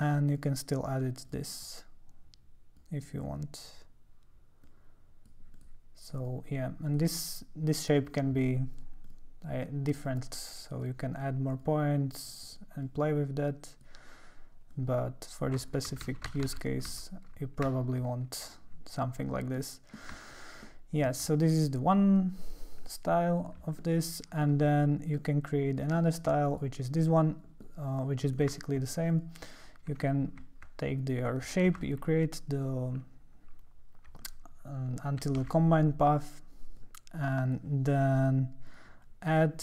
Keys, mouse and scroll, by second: 0.3 click, 1.3 click, 1.6-2.8 drag, 4.6-5.6 drag, 4.8 right click, 5.6 typing, 6.1 click, 6.9 click, 7.9 click, 9.1 click, 9.1 typing, 10.0 click, 10.2 click, 10.8 click, 12.3 click, 12.4 click, 12.9 click, 14.7 click, 16.2 ctrl+z, 16.5 ctrl+z, 17.0 ctrl+z, 19.6 ctrl+middle click, 20.3 ctrl+middle click, 20.6 ctrl+middle click, 20.6 ctrl+scroll, 21.2 middle click, 21.3-23.4 ctrl+scroll, 23.4 click, 23.8 middle click, 24.5-25.2 scroll up 1, 25.2-26.5 middle drag, 26.5 click, 27.6 middle click, 28.7 ctrl+middle click, 29.1 ctrl+click, 31.8 ctrl+c, 35.5 ctrl+v, 36.8 click, 38.7 click.